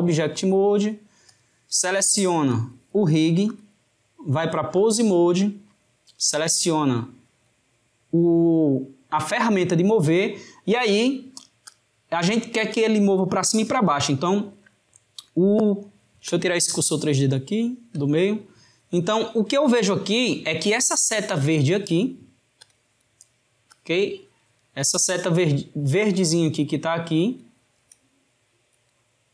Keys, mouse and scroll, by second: 1.3 click, 3.6-9.5 drag, 11.6 click, 12.7 drag, 17.5 shift+right click, 22.6-26.8 drag.